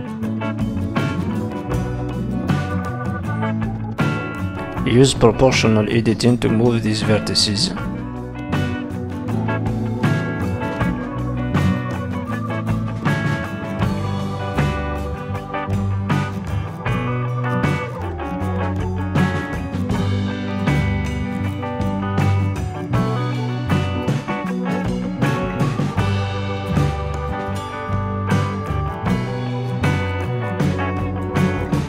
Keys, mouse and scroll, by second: 0.3 click, 1.0 middle click, 1.7 click, 2.7 middle click, 3.7 ctrl+z, 4.8 o, 5.3 click, 6.5 s, 8.0 click, 9.6 middle click, 10.3-10.7 scroll down 5, 10.7 middle click, 12.7-13.3 scroll down 2, 13.3 scroll up 1, 13.6 middle click, 16.0 middle click, 18.3-19.7 scroll down 6, 18.9 shift+middle click, 19.7 shift+middle click, 19.8 ctrl+s, 24.7 KP_3, 25.5 z, 26.3 middle click, 26.3-27.3 scroll up 3, 27.3 KP_3, 28.0-28.9 scroll up 4, 28.9 z, 29.6 z.